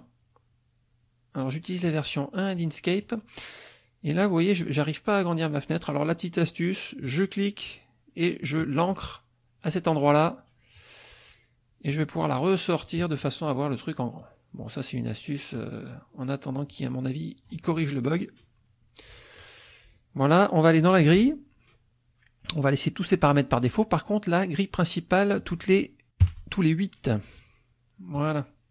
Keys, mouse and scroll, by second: 2.6 click, 4.2 click, 7.0-9.1 drag, 11.9-13.4 drag, 14.2-15.7 drag, 16.6 click, 18.2-19.6 drag, 20.8 click, 25.4 click, 26.2 KP_8, 28.2 click.